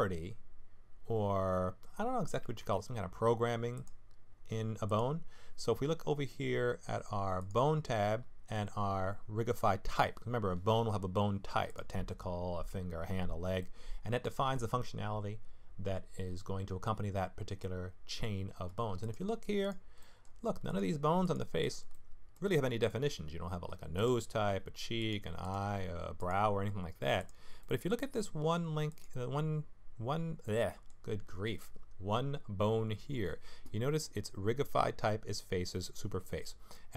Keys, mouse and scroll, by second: 2.6 ctrl+Tab, 4.9 click, 7.4 click, 11.7 click, 13.6 middle click, 17.6 middle click, 19.0 click, 19.6 click, 20.0 middle click, 20.2-20.6 scroll up 1, 20.7 click, 21.2 click, 21.6 click, 21.9 middle click, 22.9 middle click, 23.9 click, 25.0 click, 25.4 click, 26.2 click, 27.2 click, 27.6 middle click, 28.9 click, 30.4 middle click, 36.4-36.9 scroll down 2, 36.7 middle click.